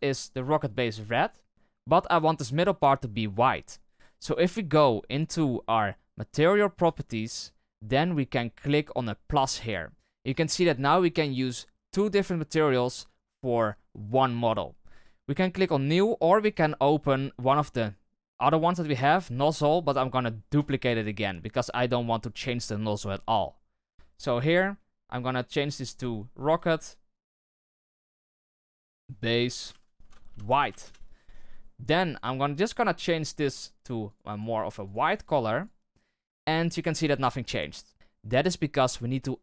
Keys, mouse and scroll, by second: 0.9-9.6 right drag, 9.6-13.0 drag, 18.5-30.8 drag, 32.9 click, 34.2-37.9 drag, 37.9 Tab.